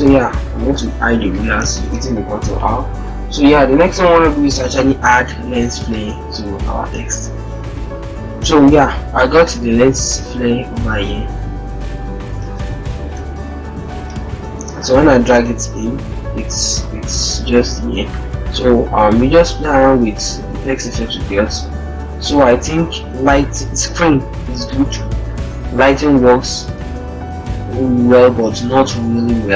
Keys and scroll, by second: 0.5 ctrl+r, 7.8 alt+Tab, 12.3 alt+Tab, 13.4 alt+Tab.